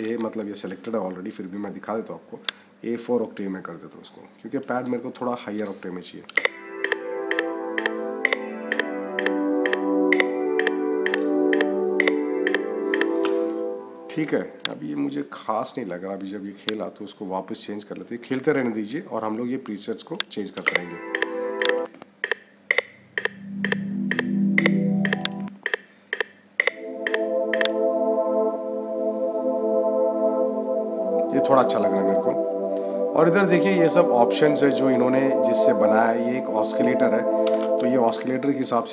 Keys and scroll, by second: 6.2 -, 13.0 -, 20.4 -, 37.4 -.